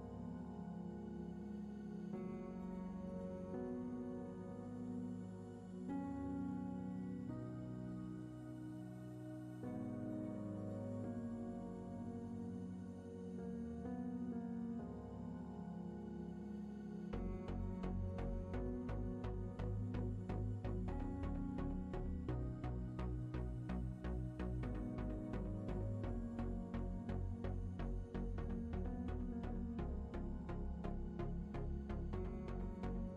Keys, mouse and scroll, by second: 1.3 shift+middle click, 2.8 ctrl+middle click, 3.3 shift+middle click, 4.2 click, 5.0 shift+middle click, 8.6 shift+a, 14.3 click, 15.8 click, 17.5 shift+middle click, 18.6 click, 19.6 shift+middle click, 20.9 click, 23.3 click, 23.8 shift+a, 27.0 click, 29.6 g, 31.7 shift+middle click.